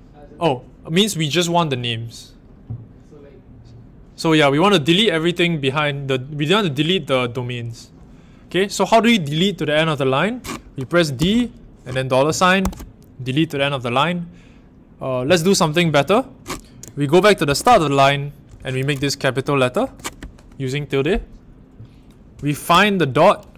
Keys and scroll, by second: 11.1 d, 12.5 shift+4, 17.4 shift+6, 19.8 shift+`, 22.6 f.